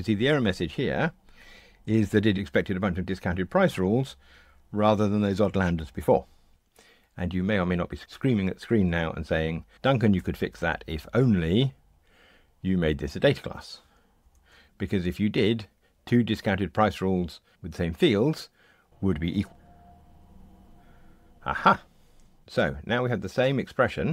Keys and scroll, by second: 10.1 shift+super+F12, 19.5 ctrl+r.